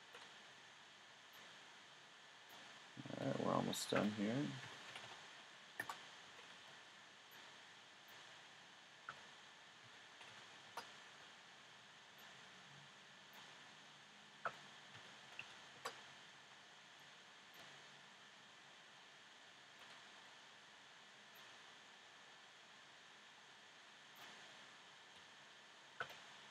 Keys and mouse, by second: 0.0 a, 0.4 b, 3.2 s, 6.3 a, 6.6 b, 8.3 s, 11.1 a, 11.5 b, 13.6 s, 19.7 a, 20.2 b, 25.2 s.